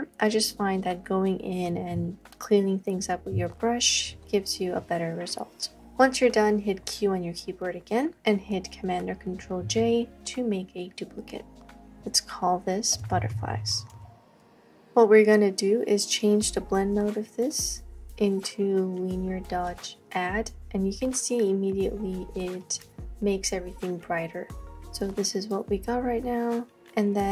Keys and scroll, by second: 6.8 q, 9.7 super+j, 13.2-14.2 typing, 14.5 Return.